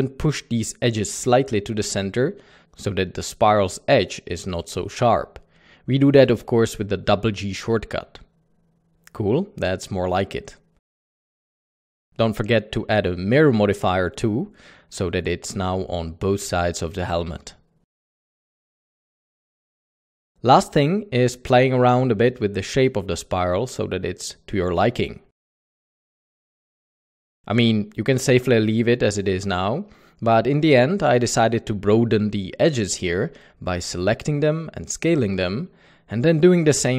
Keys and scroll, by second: 0.6 typing, 6.5 g, 8.9 Tab, 9.4 g, 9.6 alt+a, 20.8 alt+a, 23.2 c, 27.7-29.9 typing, 31.2 g, 33.0 Tab, 33.3-34.9 typing, 33.7 Tab, 36.4 s.